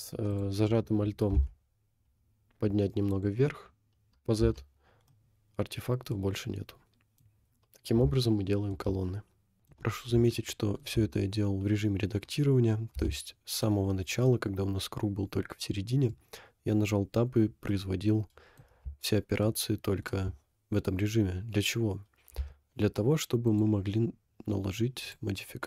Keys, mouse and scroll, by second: 0.3 alt+click, 1.4 g, 4.5 Tab, 5.2 middle click, 6.8 middle click, 7.3-7.7 scroll down 4, 8.2 shift+middle click, 9.6 middle click, 10.5 shift+middle click, 13.0 Tab, 13.7 middle click, 17.7 middle click, 19.5 shift+middle click, 22.4 Tab, 23.5-25.2 drag.